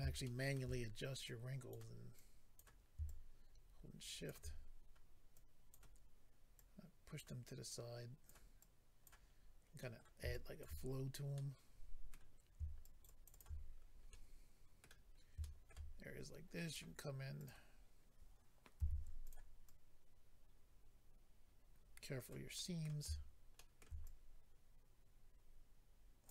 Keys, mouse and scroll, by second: 0.2 shift+middle click, 0.7-1.2 scroll up 2, 1.9 scroll up 2, 2.1 click, 3.0 shift+click, 5.3 click, 6.5 click, 7.7 click, 8.6 click, 9.3 scroll down 2, 9.8 middle click, 10.3 shift+click, 10.9 scroll down 2, 11.3 middle click, 12.3-12.7 scroll up 2, 12.8 shift+click, 13.4 shift+click, 13.7 scroll down 1, 14.1 middle click, 15.0 middle click, 15.0-15.3 scroll up 1, 15.4 shift+middle click, 15.7 middle click, 15.9-16.7 scroll up 3, 16.7 click, 16.7 scroll up 1, 17.3 click, 17.5 click, 17.7 scroll up 3, 18.8 f, 19.2 click, 19.3 click, 19.6 click, 22.5 middle click, 23.5 shift+middle click, 23.8 middle click, 24.1 click.